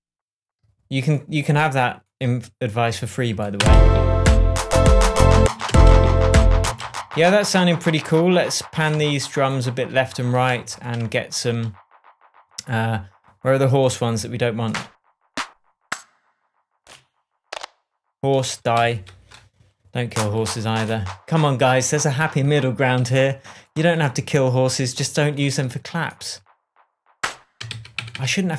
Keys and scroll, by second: 3.6 space, 5.3 space, 10.6 shift+super+Tab, 18.7 Delete, 27.7 super+d.